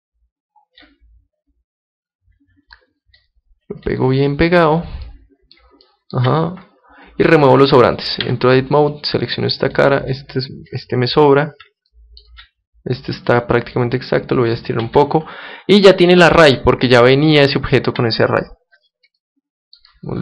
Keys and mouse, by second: 1.2-3.2 middle drag, 3.2-5.0 drag, 5.0-8.2 middle drag, 8.2 Tab, 8.6 middle click, 8.8-10.6 right drag, 9.7-11.6 drag, 11.0-13.7 middle drag, 13.2-15.0 right drag, 13.7-15.6 drag, 14.8 Tab, 15.7-20.2 middle drag.